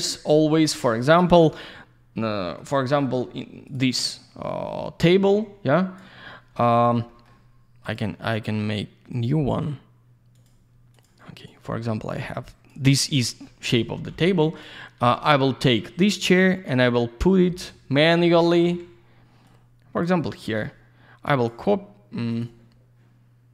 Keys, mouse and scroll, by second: 0.1 scroll down 1, 0.3 middle click, 0.8 scroll up 1, 1.1 click, 1.2 click, 2.3 middle click, 2.8 scroll up 1, 3.6 click, 3.7 click, 5.7 click, 6.2 scroll down 1, 6.5 middle click, 7.1 middle click, 7.2 middle click, 7.8 click, 7.9 click, 9.1 click, 9.2 click, 10.3 click, 10.4 click, 10.9 click, 11.0 click, 11.5 click, 13.4 middle click, 13.6 middle click, 13.9 scroll up 1, 14.4 click, 15.7 click, 17.6 typing, 19.4 click, 22.3 click, 22.4 click.